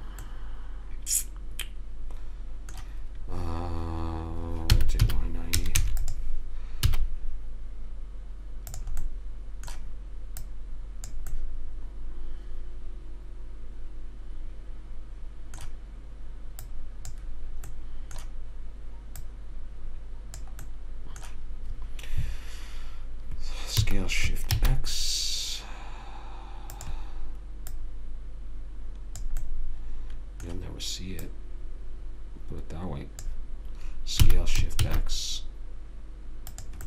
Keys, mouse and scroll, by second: 0.6-1.8 middle drag, 5.0 r, 7.2 s, 9.4-10.7 middle drag, 10.7 click, 12.9 middle click, 17.0 click, 18.1-20.7 middle drag, 19.6 click, 21.0-24.1 middle drag, 24.1 s, 28.0 click, 29.9-31.8 middle drag, 31.5 click, 34.6 s.